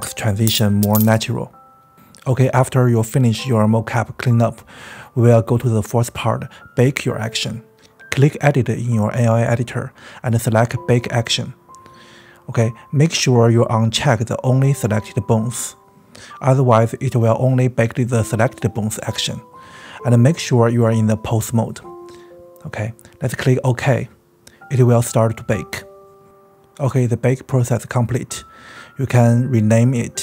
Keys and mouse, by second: 2.9 space, 3.7 click, 4.0 click, 4.3 click, 4.3 space, 4.8 s, 4.9 click, 5.6 space, 5.9 click, 7.7 click, 20.4-25.8 drag, 27.7-30.2 drag.